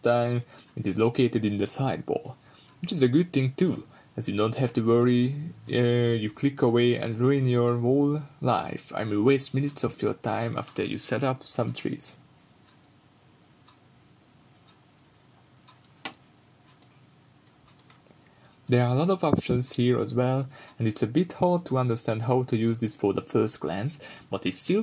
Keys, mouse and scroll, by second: 0.0-1.9 middle drag, 0.0 shift+a, 0.8 s, 1.9-4.4 drag, 4.4-4.9 shift+right drag, 8.2-12.3 middle drag, 8.8-10.3 scroll up 2, 10.3-12.3 scroll up 1, 12.3 click, 14.4-16.4 drag, 17.2-23.0 middle drag, 17.9-18.3 scroll up 2, 19.0 scroll down 1, 20.0-23.0 scroll up 2, 23.0-24.1 drag, 24.7-24.8 drag.